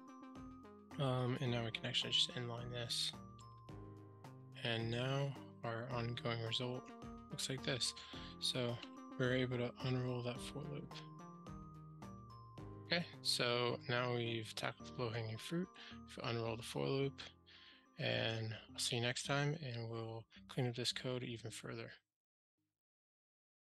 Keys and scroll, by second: 1.9 alt+super+n, 8.9 super+s.